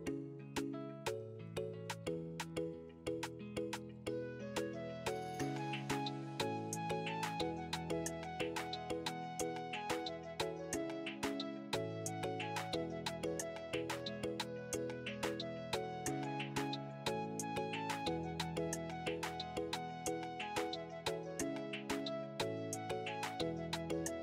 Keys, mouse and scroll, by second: 0.2 click, 4.0-5.8 scroll up 3, 4.2 middle click, 7.0 Tab, 9.4 2, 10.1 click, 12.9 Tab, 14.5 click, 17.1 click, 18.9 click, 19.8 click.